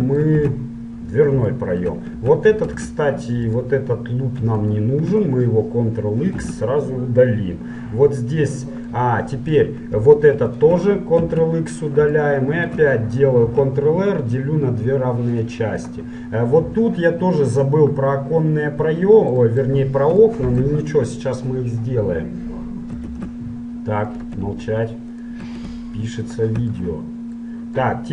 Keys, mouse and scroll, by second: 0.1-3.7 middle drag, 0.5 z, 2.8 ctrl+Tab, 4.7-6.7 right drag, 6.5 ctrl+x, 7.6-10.1 middle drag, 10.5-12.2 right drag, 11.3 ctrl+x, 12.2 middle click, 13.6 ctrl+r, 14.0 middle click, 16.4-25.2 middle drag, 16.4-17.9 scroll up 1, 17.9 scroll up 1, 18.4 scroll up 1, 23.1 ctrl+Tab, 25.2-26.9 right drag, 26.9 middle click, 27.1 right click, 27.3 middle click, 27.3 right click, 27.9-28.1 middle drag.